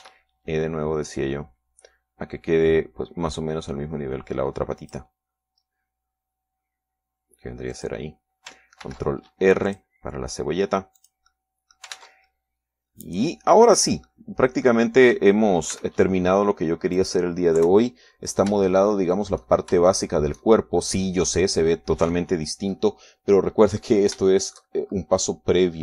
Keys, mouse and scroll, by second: 0.5 r, 1.1 click, 1.6 e, 9.3 click, 10.5 ctrl+r, 11.3 click, 12.6 click, 13.5 ctrl+middle click, 13.5 ctrl+Tab, 14.7 click, 15.3 right click, 15.7 middle click, 17.3 e, 18.6 click, 19.2 KP_3, 19.7-20.1 scroll down 2, 20.3-22.1 shift+middle drag, 25.5 scroll up 2.